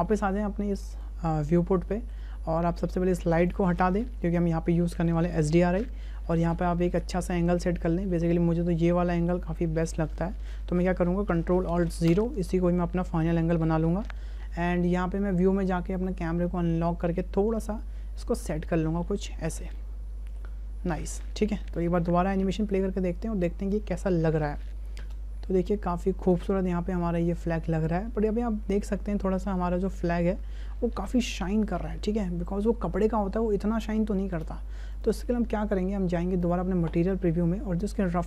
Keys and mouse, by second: 0.9 right click, 1.9 shift+middle drag, 2.9 shift+middle click, 3.5 right click, 4.3 Delete, 6.2 shift+drag, 6.7-7.5 middle drag, 7.8-8.1 ctrl+middle drag, 8.3-9.1 middle drag, 9.3-9.8 ctrl+middle drag, 10.0 shift+middle click, 12.1 ctrl+alt+KP_0, 14.2 n, 15.2 right click, 15.9 right click, 16.7-17.6 shift+middle drag, 17.8-18.8 middle drag, 19.0 ctrl+click, 19.8 shift+click, 21.8 click, 22.6 click, 25.0 space, 34.3 space, 36.4 click, 38.1 click.